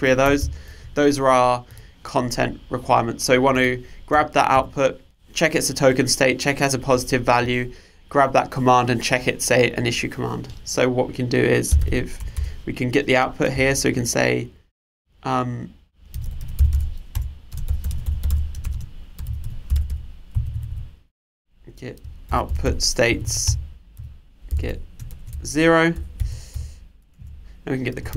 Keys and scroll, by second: 0.4 super+/, 17.1 Return, 23.5 Return.